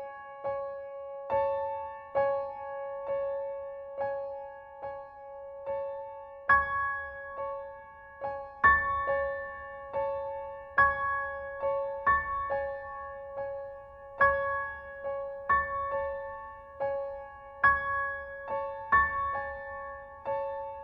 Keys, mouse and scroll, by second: 0.7 click, 2.1 click, 2.8 click, 3.8 click, 4.9 click, 5.8 click, 8.9-12.7 drag, 13.8 click, 14.2 Home, 17.2 click, 18.2 click.